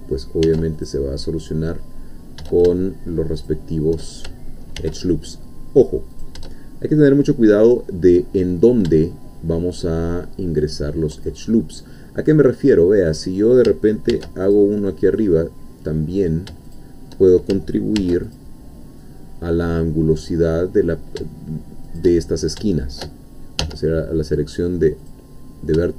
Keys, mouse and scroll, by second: 0.4 ctrl+r, 0.8 ctrl+click, 3.4 shift+click, 4.8 ctrl+r, 6.2 shift+click, 10.6 shift+click, 14.1 ctrl+r, 14.5 ctrl+click, 16.7 shift+click, 18.0 ctrl+r, 18.3 ctrl+click, 21.9 shift+click, 22.3 shift+scroll up 2, 22.7 shift+middle click, 23.6 1, 25.1 click.